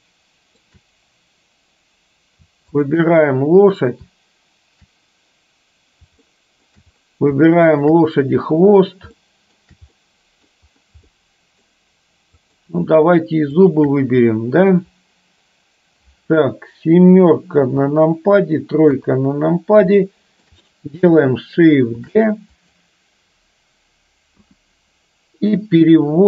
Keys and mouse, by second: 6.3-6.7 shift+middle drag, 7.7 shift+click, 9.3 shift+middle click, 10.1 middle click, 11.1 shift+middle click, 12.4 shift+click, 14.3 middle click, 17.7 KP_7, 18.9 KP_3, 20.1-20.4 shift+middle drag, 22.1 shift+d, 24.4 KP_1.